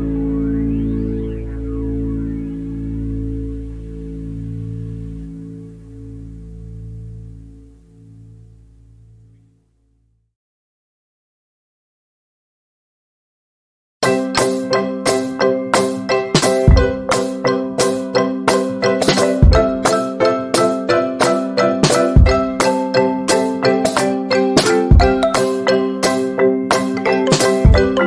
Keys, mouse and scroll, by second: 0.0 ctrl+z, 0.9-2.9 drag, 2.9 ctrl+z, 3.6 ctrl+z, 4.4 click, 4.7 Escape, 5.2 click, 6.0 ctrl+z, 6.5 click, 8.1 shift+Page_Up, 9.8 click, 13.3 shift+click, 17.2 Delete, 18.2 click, 18.6 right click, 19.9 shift+scroll down 1, 21.2-22.9 drag, 24.1 ctrl+z, 24.6 ctrl+d, 24.9-27.6 drag, 27.6 F10, 27.9 click.